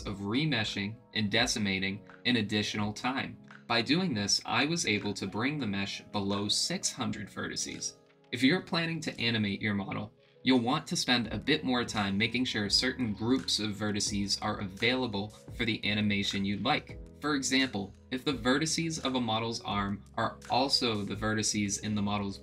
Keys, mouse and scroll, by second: 4.5-6.9 drag, 8.1-11.2 drag, 11.4 click, 12.7 click, 13.7-16.0 drag, 17.0-18.5 drag, 19.2-19.8 drag, 19.8 middle click, 21.3-22.4 drag.